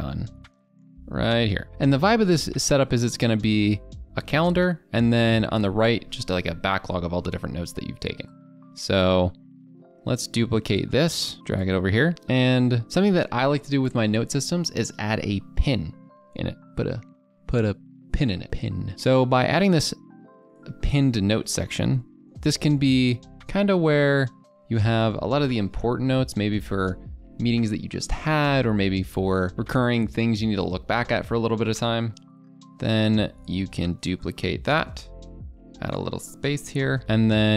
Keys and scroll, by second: 21.0 Caps_Lock, 24.8 ctrl+a, 25.1 ctrl+v, 25.8 ctrl+z, 26.4 ctrl+b.